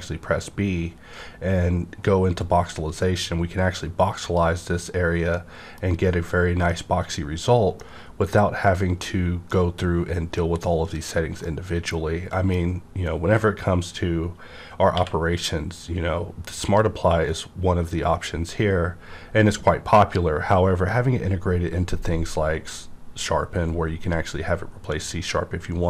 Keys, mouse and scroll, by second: 0.1 scroll down 1, 0.7 scroll down 1, 1.8-2.1 scroll down 1, 2.1-4.2 scroll, 4.2 click, 5.3-14.9 middle drag, 14.9-17.2 middle drag, 14.9 q.